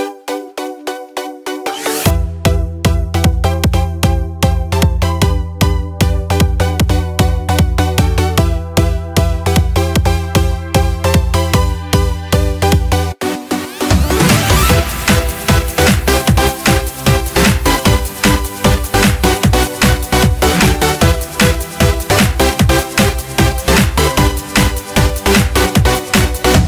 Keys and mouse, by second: 6.0 s, 11.5 r, 20.9-22.6 drag, 22.6-26.6 right drag.